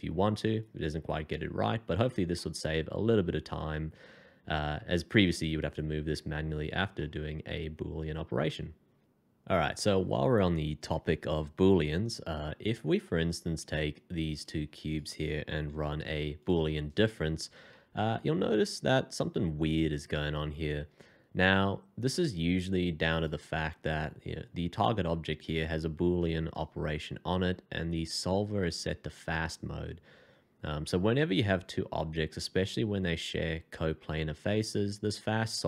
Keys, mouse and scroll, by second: 2.3 middle click, 6.9 middle click, 14.8 shift+click, 16.4 f, 17.7 middle click.